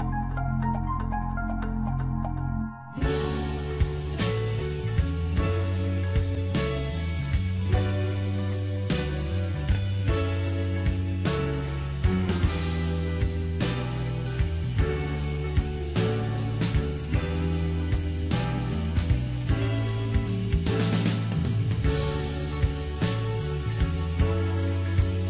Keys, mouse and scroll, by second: 4.2 g, 8.8 s, 11.3-11.7 scroll up 2, 11.7-14.8 middle drag, 15.1 middle click, 15.9 Tab, 16.5-16.9 scroll down 2, 16.9-18.5 middle drag, 18.5-21.6 drag, 21.9 click, 23.1 click, 24.4-25.2 scroll down 1.